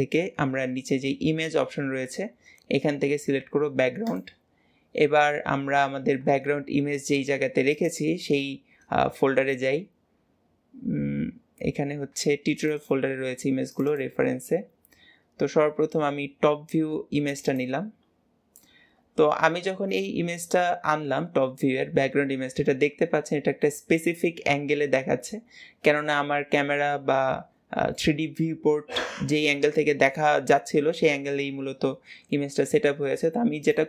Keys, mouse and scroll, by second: 18.5-21.5 middle drag, 33.5 click.